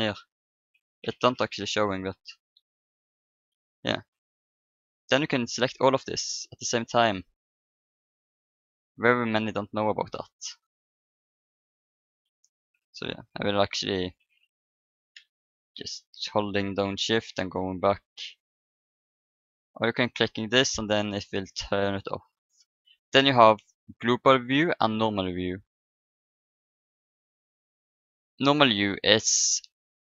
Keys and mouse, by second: 2.9-13.3 drag, 15.1 ctrl+z, 15.7-16.8 ctrl+z, 17.2-19.8 middle drag, 17.6 ctrl+z, 19.2-24.5 drag, 19.2 right click.